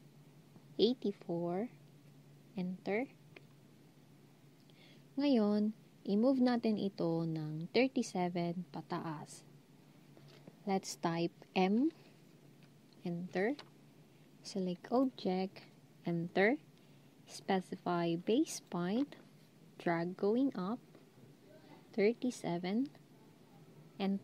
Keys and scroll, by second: 0.8-1.5 typing, 11.6 m, 21.6-22.4 typing.